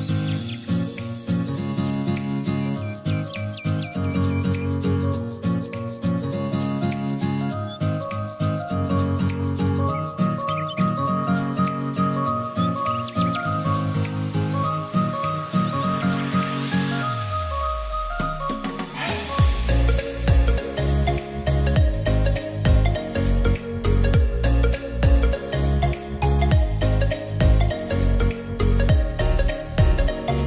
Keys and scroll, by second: 0.0-0.1 typing, 11.3 ctrl+a, 16.7-18.3 typing, 25.8 ctrl+r.